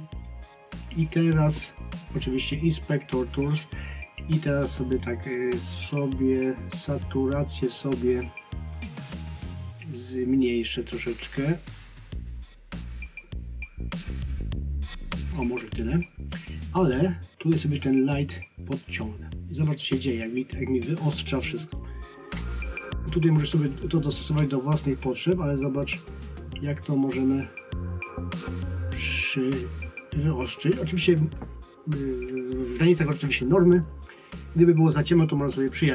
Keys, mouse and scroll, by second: 5.0 click, 8.8 click, 18.7 click, 26.8 click.